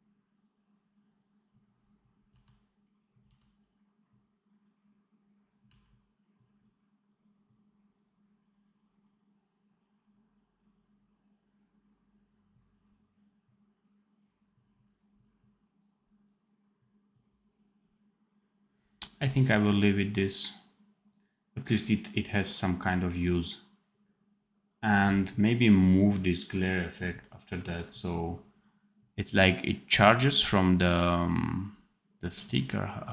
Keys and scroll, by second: 2.2 v, 3.1 x, 5.5 v.